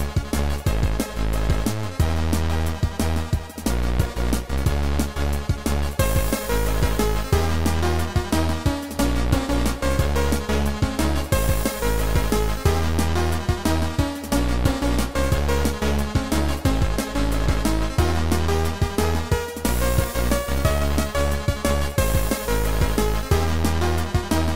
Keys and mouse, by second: 0.2 right click, 2.0 click, 3.3 click, 4.7 click, 8.3 click, 8.5 click, 9.3 click, 10.5 right click, 10.5 click, 11.6 click, 13.5 right click, 15.2 right click, 16.0 click, 16.5 click, 17.5 right click, 20.3 click, 21.2 click, 23.8 right click.